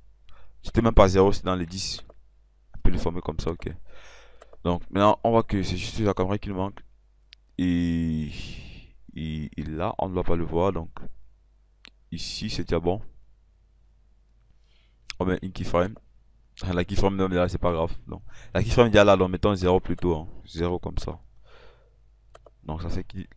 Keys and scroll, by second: 20.8 KP_0.